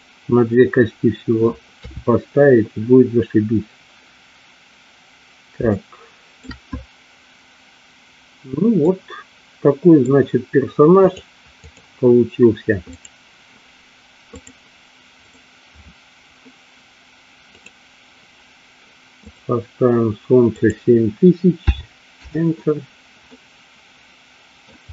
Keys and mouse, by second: 2.0 KP_3, 5.9 shift+middle click, 8.9-10.1 middle drag, 11.2 click, 13.1 click, 14.7 click, 15.4 click, 17.7 click, 19.4 click, 20.6-22.5 drag, 23.5-24.8 middle drag.